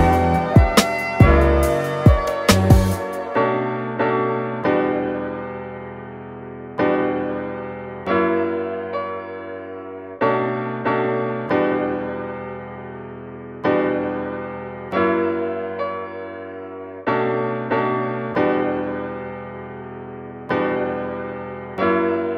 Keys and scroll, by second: 8.9 super+z, 10.4 super+z.